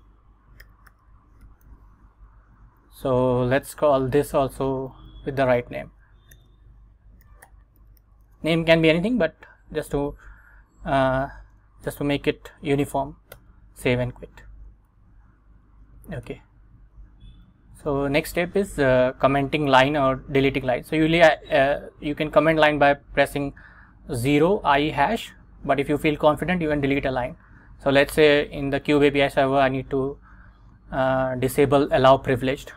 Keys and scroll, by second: 0.0-2.3 typing, 2.4 Escape, 2.8 Up, 3.4 Up, 4.7 Left, 6.4-8.9 typing, 9.1 Escape, 12.0 shift+;, 12.5 x, 13.4 Return, 15.0 super+Tab, 16.4 Return, 17.8 Right.